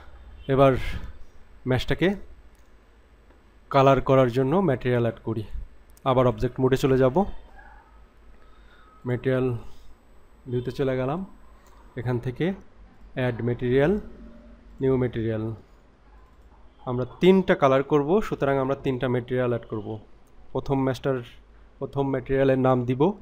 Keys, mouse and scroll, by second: 6.2-7.0 drag, 9.0-11.6 drag, 12.9 click, 14.7 click, 16.2 click, 16.4-23.2 drag.